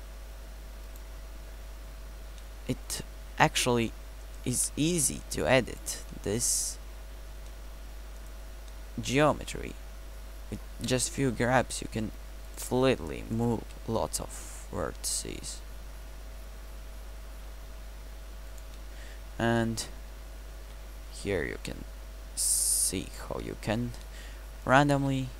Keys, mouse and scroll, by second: 4.6 g, 9.4 g, 13.7 g, 18.8 middle click, 20.7 g, 25.0 g.